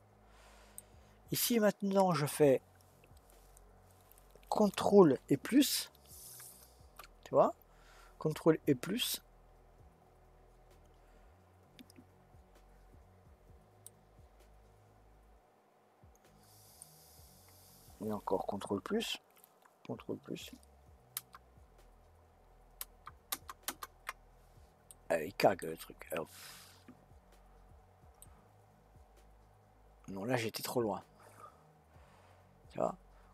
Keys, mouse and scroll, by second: 6.3 shift+KP_Add, 13.8-16.8 middle drag, 27.2-31.2 middle drag.